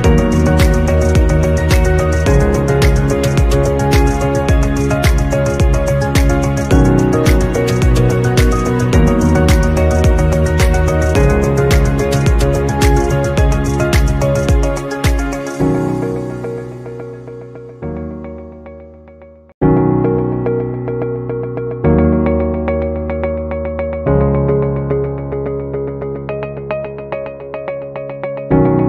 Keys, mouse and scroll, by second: 4.0 alt+scroll up 1, 5.1-5.7 scroll down 1, 5.7 scroll up 1, 6.4-6.8 scroll down 1, 7.3 alt+scroll down 1, 8.5 alt+scroll down 1, 8.9 alt+scroll up 1, 12.7 right click, 13.6 right click, 13.7 alt+scroll down 1, 15.1 alt+scroll down 1, 16.1 alt+scroll, 22.7-23.1 scroll up 1, 23.1 scroll down 1, 24.5 alt+scroll down 1, 27.5 scroll up 2, 28.1 scroll down 1.